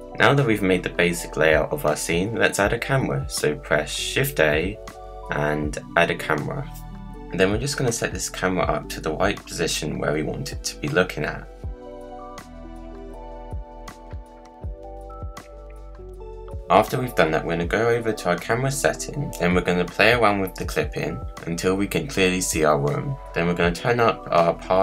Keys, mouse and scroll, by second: 0.4 click, 1.0 scroll down 2, 1.2 middle click, 2.0 Tab, 2.4 scroll down 1, 2.5 middle click, 3.1 click, 4.1 shift+a, 6.7-7.5 scroll up 4, 7.5 scroll down 1, 7.6-8.4 middle drag, 8.4-8.9 scroll up 1, 8.9-9.3 scroll up 1, 9.3-12.1 middle drag, 12.1 ctrl+alt+KP_0, 12.5-14.0 drag, 14.0 g, 15.9 click, 18.2 click, 19.5-22.5 drag, 24.2-24.8 drag.